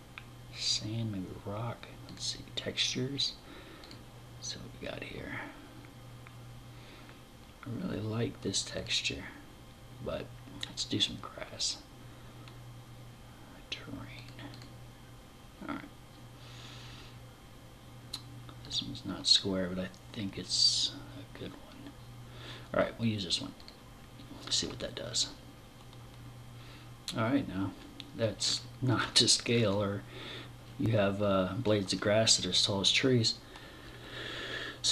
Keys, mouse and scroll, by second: 27.0 scroll down 4, 27.8-29.2 scroll up 11, 30.0-31.3 scroll down 12, 33.2-33.6 scroll down 3, 34.5-34.9 scroll down 2.